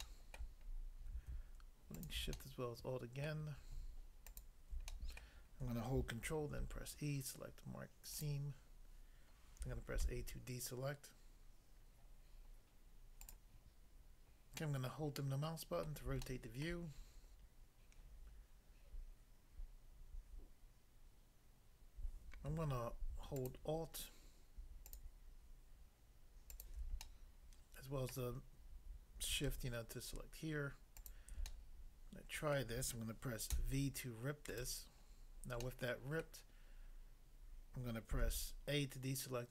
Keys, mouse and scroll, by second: 0.0 shift+middle click, 0.6 scroll up 1, 1.9 alt+click, 2.0 alt+click, 2.3 middle click, 3.2 middle click, 4.3 alt+click, 4.9 middle click, 5.1 middle click, 6.5 ctrl+e, 8.1 click, 8.2 click, 10.1 a, 13.3 click, 14.5 middle click, 15.9 middle click, 16.2 shift+middle click, 23.3 alt+click, 23.5 alt+click, 27.1 middle click, 28.1 middle click, 30.9 alt+click, 31.1 alt+click, 31.5 middle click, 32.6 middle click, 33.5 v, 34.5 right click, 35.1 scroll down 1, 35.7 middle click, 36.3 middle click, 38.2 a.